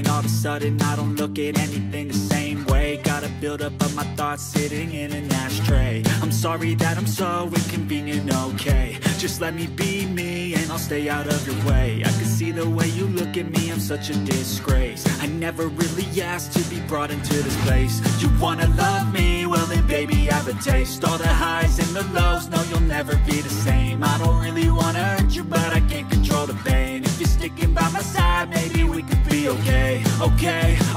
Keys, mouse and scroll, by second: 0.1-7.5 drag, 7.5 right click, 15.4 space.